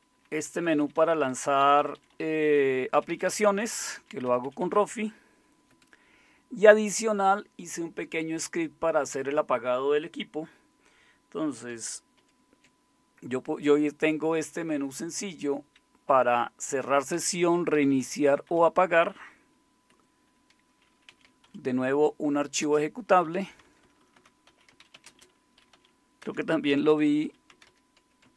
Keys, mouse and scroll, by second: 0.4 Down, 0.6 Down, 0.8 Down, 0.9 Down, 1.1 Down, 1.6 Up, 1.8 Up, 1.9 Up, 2.1 Up, 2.3 Up, 2.4 Up, 2.9 Down, 3.1 Down, 3.2 Down, 3.4 Down, 3.6 Down, 3.8 Down, 3.9 Down, 4.2 Up, 4.4 Up, 4.6 Up, 5.7 Up, 5.7 Down, 5.7 Escape, 5.7 …, 12.2 shift+super+x, 17.1 Down, 17.7 Down, 18.3 Up, 18.5 Up, 19.9 Escape, 20.8-22.6 typing, 23.6-27.7 typing, 28.2 Tab.